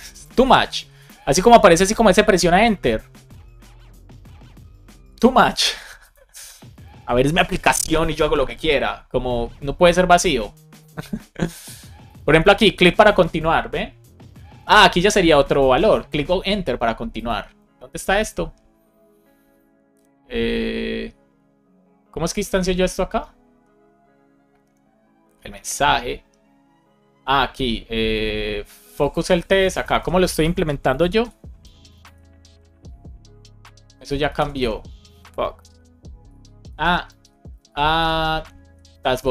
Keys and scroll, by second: 29.9 super+c, 30.8 shift+super+f, 31.4 shift+', 32.0 super+v, 34.2 shift+super+Left, 34.5 BackSpace, 35.5 super+o, 36.2 super+p, 36.7 Escape, 37.1 super+p, 37.6 shift+a, 38.8 Down, 39.1 Return.